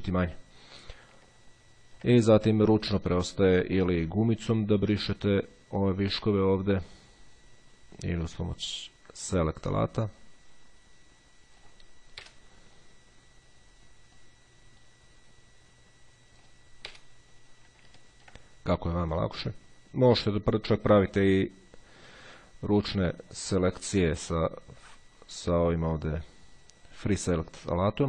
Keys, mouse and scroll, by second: 1.4-2.4 ctrl+scroll up 2, 4.1 click, 5.2-6.7 drag, 7.1 click, 8.9 click, 10.3-12.3 drag, 12.4 Delete, 14.4-17.2 drag, 17.1 Delete, 18.1-18.7 ctrl+scroll up 1, 19.2-22.8 drag, 23.6 click.